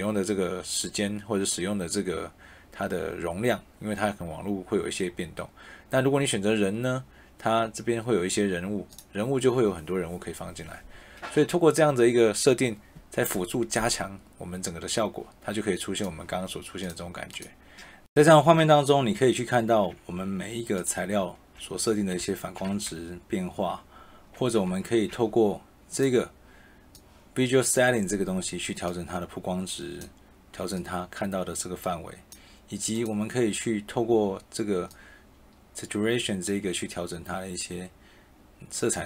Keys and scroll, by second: 20.1 q, 22.8 a, 24.6 e.